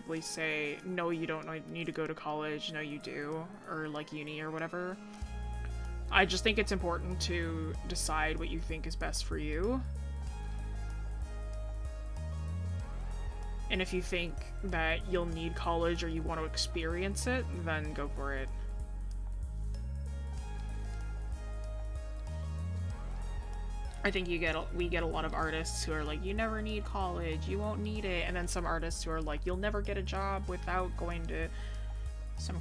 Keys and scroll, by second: 28.2 scroll down 1, 28.9 scroll up 1.